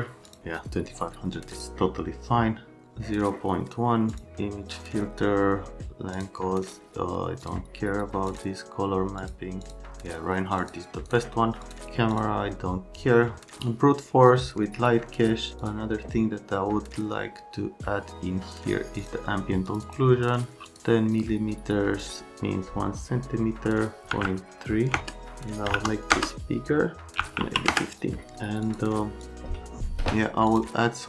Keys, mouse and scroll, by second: 0.3 click, 1.5 click, 4.1 click, 6.1 click, 7.4 click, 8.3 click, 9.2 click, 9.6 click, 10.6 click, 11.0 click, 11.6 click, 12.1 click, 15.6 click, 19.0 click, 19.6 click, 19.8 click, 20.7 click, 24.0 KP_0, 24.1 KP_1, 24.9 KP_Enter, 25.5 KP_5, 25.7 KP_0, 26.1 KP_Enter, 27.2 KP_1, 27.4 KP_5, 27.7 KP_Enter, 28.6 click, 29.2 click, 30.5 click.